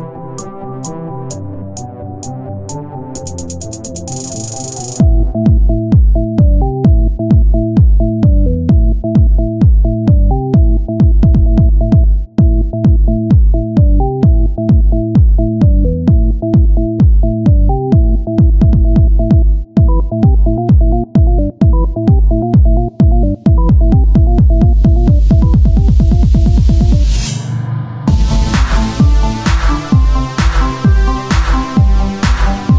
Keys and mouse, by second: 1.6 KP_1, 2.7 s, 4.7 c, 6.4-8.5 drag, 8.5 c, 9.3-10.8 drag, 9.6 z, 10.8-13.3 middle drag, 12.8 KP_3, 13.3 z, 13.9 c, 14.7-19.9 drag, 15.5-17.1 right drag, 15.5 c, 17.5 s, 19.6 right click, 19.6 s, 19.9 c, 20.9 click, 21.7 z, 23.9 KP_1, 25.4 KP_3, 25.7 z, 25.9 c, 27.8 click, 27.8 middle click, 27.8 right click, 28.1 z, 28.3 z, 28.5 c, 29.3-30.8 drag, 30.1 z, 31.3 z, 31.3 c, 31.7 z.